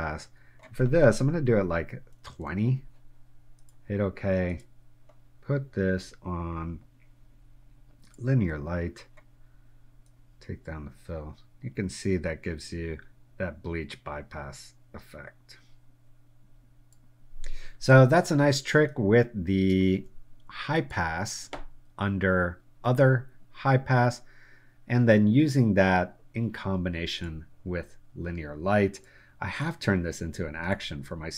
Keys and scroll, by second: 2.2 2, 2.6 0, 18.5 space, 19.9 space.